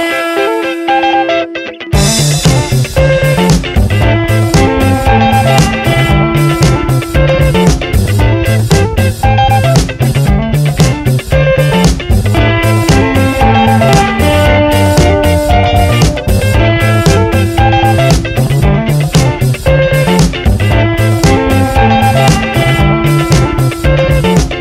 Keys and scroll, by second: 4.7 shift+g, 6.1-8.7 typing, 10.0 shift+m, 10.3 a, 13.5-14.7 typing, 16.1 BackSpace, 17.2-18.3 typing, 20.1 ctrl+Return, 20.8 v, 21.0 Right.